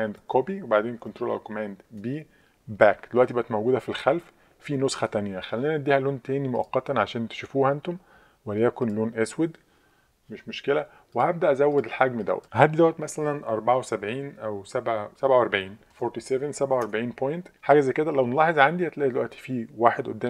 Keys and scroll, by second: 0.2 super+c, 1.9 super+b, 15.7-16.4 typing, 16.8 Tab.